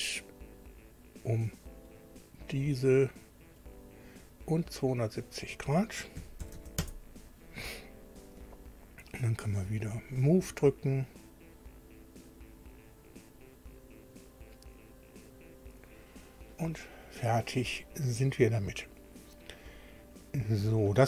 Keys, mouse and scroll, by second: 1.9 click, 3.6 click, 6.2 KP_2, 6.4 KP_7, 6.5 KP_0, 6.8 KP_Enter, 10.0 click, 13.2 click, 15.3 click.